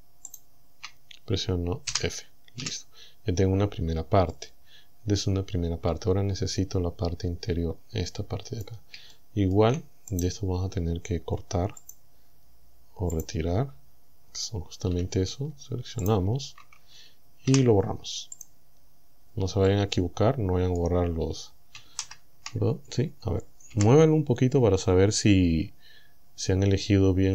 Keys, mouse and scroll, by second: 0.3 shift+right click, 1.9 f, 2.6 a, 4.3-8.9 drag, 9.1 shift+middle click, 10.1 right click, 11.9 click, 13.2 click, 14.9 a, 16.1 alt+shift+right click, 17.5 Delete, 18.4 click, 19.7-21.0 drag, 22.1 ctrl+z, 23.7 g.